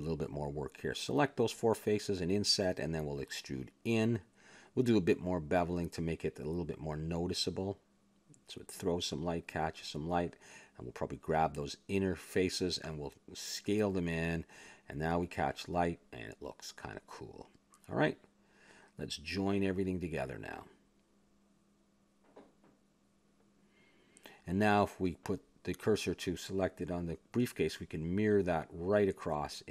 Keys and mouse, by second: 0.4 click, 0.4 right click, 0.6 Tab, 1.4 click, 2.5 i, 4.3 middle click, 4.5 click, 4.7 e, 5.6 a, 5.8 Tab, 6.9 Tab, 7.7 ctrl+Tab, 8.4 click, 9.1 ctrl+b, 10.1 a, 10.3 Tab, 10.7 middle click, 11.3 middle click, 11.6 Tab, 12.5 ctrl+Tab, 13.3-14.9 drag, 14.9 s, 15.8 Tab, 16.4 middle click, 20.6 Tab, 20.6 x, 23.5-25.0 drag, 24.7 ctrl+j, 25.3 middle click, 26.0 click, 26.5 shift+s, 27.3-29.4 drag.